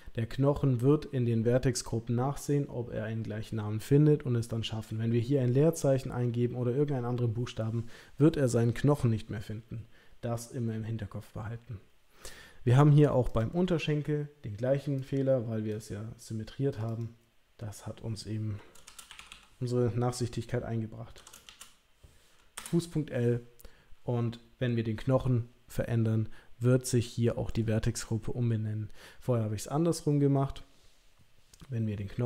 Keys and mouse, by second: 13.3 click, 15.0 click, 16.9-23.0 drag, 19.3 s.